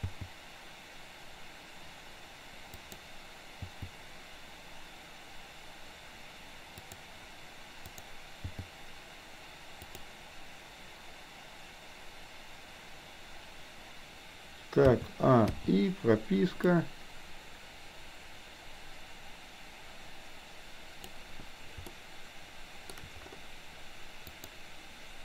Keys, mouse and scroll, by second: 0.0 g, 3.6 g, 7.9 click, 8.4 g, 15.6 i, 16.9-21.2 drag, 22.0-23.0 shift+middle drag, 24.4 click.